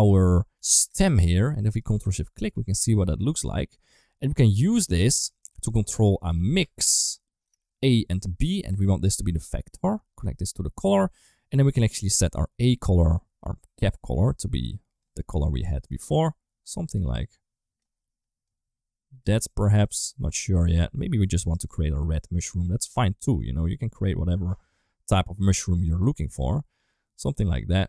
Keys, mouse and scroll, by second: 1.5 shift+c, 1.6 shift+click, 2.3-2.9 middle drag, 3.6 ctrl+z, 4.2 click, 4.4 click, 5.3-8.1 drag, 8.9 click, 9.1 click, 10.3 click, 27.4 middle click.